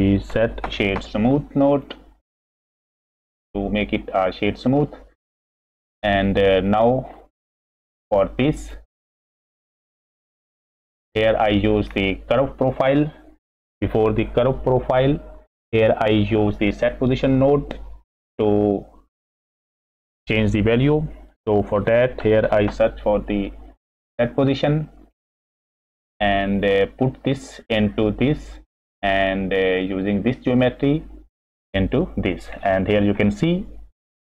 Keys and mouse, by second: 5.5 middle click, 6.3 middle click, 7.1 click, 8.3 click, 9.1 click, 9.6 click, 10.4 click, 11.6 middle click, 16.9 middle click, 21.7 shift+a, 25.7 middle click, 26.2 click, 27.2-28.2 drag, 30.2 click, 30.4-31.7 drag, 32.5 click.